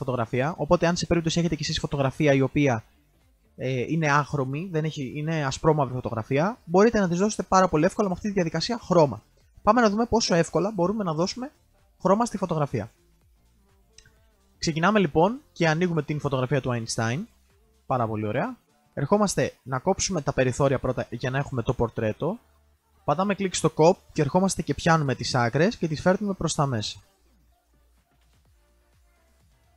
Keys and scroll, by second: 22.5 ctrl+alt+z.